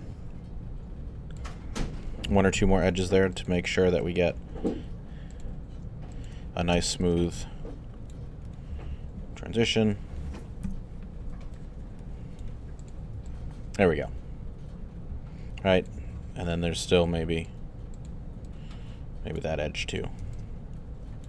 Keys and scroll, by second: 2.5 alt+q, 10.6 3.